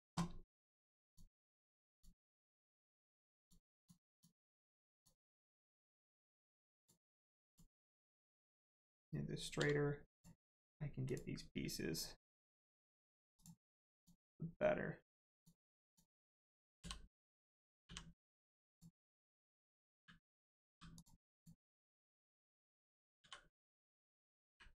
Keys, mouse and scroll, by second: 1.1 click, 3.3 click, 6.7 click, 8.0 scroll down 1, 9.5 g, 10.1 click, 10.3-11.0 scroll up 1, 11.0 click, 12.7 u, 13.3 click, 13.7 scroll down 1, 13.9 click, 15.9 click, 17.8 u, 18.7 click, 20.7 g, 20.9 click, 24.4 u.